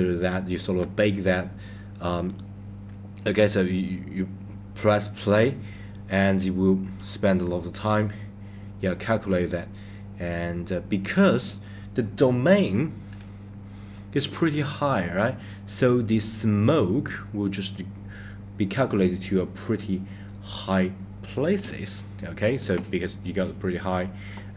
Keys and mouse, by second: 2.2 click, 13.2-14.6 middle drag, 21.7-22.6 shift+middle drag.